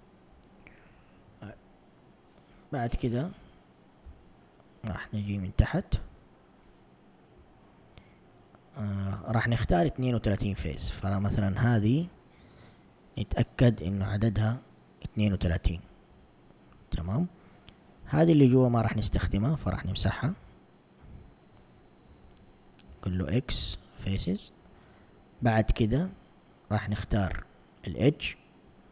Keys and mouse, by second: 5.2 z, 9.7 a, 10.6 alt+click, 16.4 alt+click, 17.4 alt+click, 18.6 c, 22.9 x, 25.4 ctrl+Tab, 27.1 ctrl+Tab.